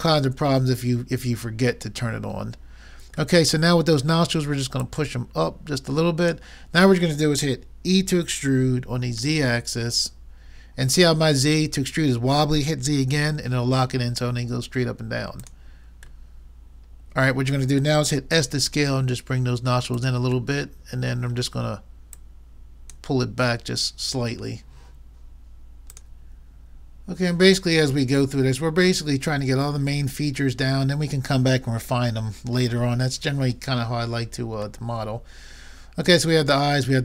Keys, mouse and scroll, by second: 4.9-6.7 drag, 7.9 e, 11.5 click, 12.5 click, 16.3 middle click, 16.9 middle click, 17.1 middle click, 18.3 s, 22.2-23.9 drag, 22.2 middle click, 22.2 right click, 24.3-25.5 middle drag, 34.9-36.8 middle drag.